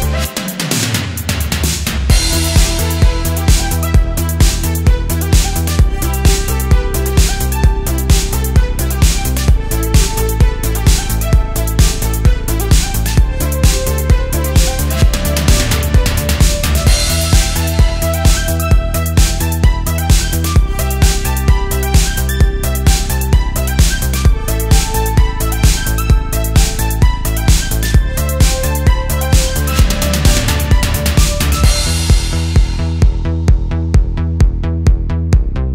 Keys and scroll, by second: 0.5 space, 2.0 super+z, 2.9 super+z, 3.7 space, 7.1 space, 10.4 alt+super+space, 12.6 space, 13.7 space, 17.1 space, 19.1 space, 20.3 space, 24.7 space, 25.1 space, 25.4 space, 27.8 space, 28.2 space, 28.7 space, 29.9 space, 30.2 space, 35.0 space.